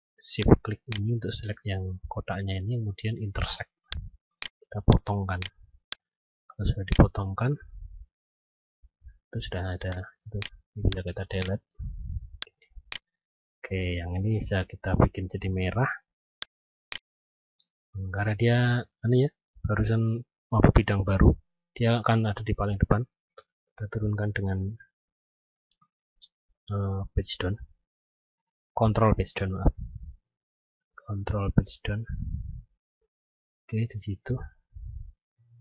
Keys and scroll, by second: 27.1 ctrl+Page_Down.